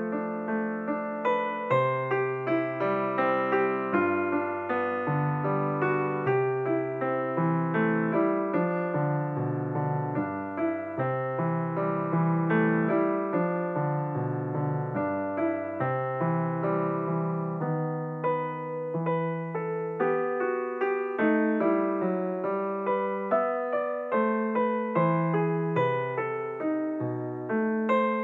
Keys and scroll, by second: 0.9 0, 2.8 space.